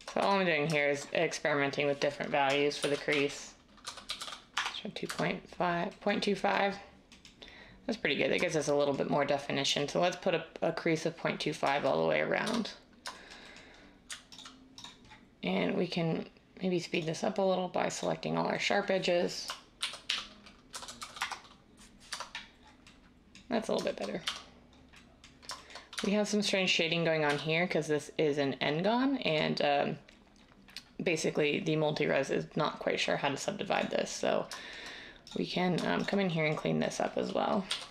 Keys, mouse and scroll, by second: 0.2 Tab, 0.6-1.4 typing, 2.8-5.7 typing, 9.2-9.9 typing, 12.4 Tab, 19.8-21.0 typing, 21.2 Return, 22.0 Tab, 22.8 typing, 24.2 Tab, 25.9 Tab, 27.2 Tab, 37.6 j.